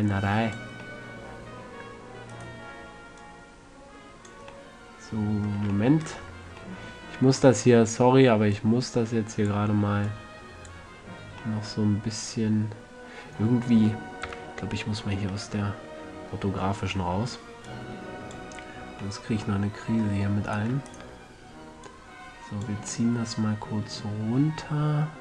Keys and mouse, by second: 1.2-2.1 middle drag, 2.7-5.1 right drag, 3.6-5.1 drag, 5.0-5.6 middle drag, 5.2 click, 5.2 right click, 7.4 middle click, 12.0-12.4 middle drag, 14.6 KP_5, 15.9-17.1 middle drag, 18.0-19.5 drag, 18.9 a, 19.5-19.9 middle drag, 20.8-22.4 middle drag, 23.4-24.2 middle drag.